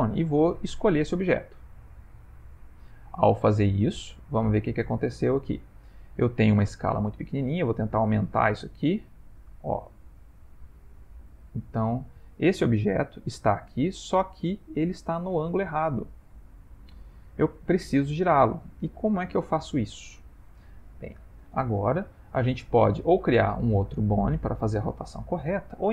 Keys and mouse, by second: 0.6 click, 3.7 middle click, 4.5 ctrl+middle click, 5.2 shift+middle click, 6.8 click, 13.5 middle click, 14.7-15.6 middle click, 15.5 middle click, 21.9 shift+middle click, 23.2 ctrl+middle click.